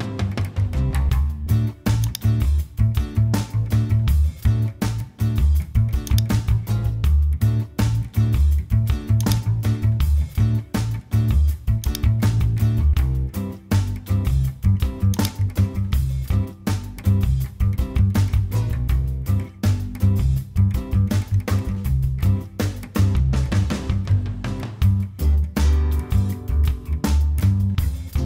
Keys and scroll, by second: 4.0 super+m.